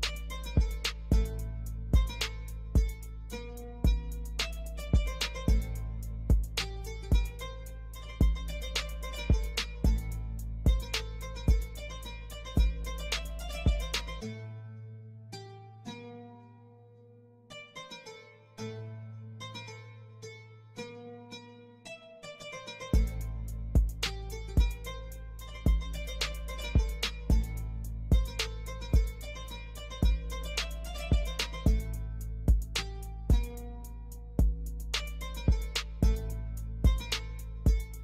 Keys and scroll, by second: 7.5 Escape, 13.2 e, 13.8 Escape, 15.2 F2, 18.2 F3, 22.6 Escape, 33.0 F2, 37.6 ctrl+Page_Down.